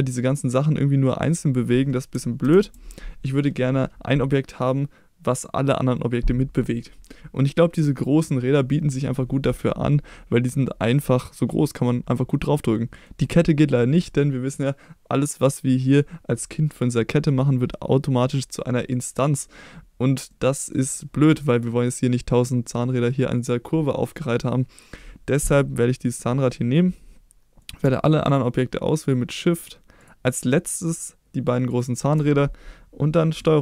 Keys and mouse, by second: 2.4 ctrl+z, 12.7 middle drag, 20.3-20.7 middle drag, 21.3 middle drag, 27.6 click, 28.3 shift+click, 29.0 shift+click, 29.6 shift+click, 30.0 shift+click, 31.7 shift+click.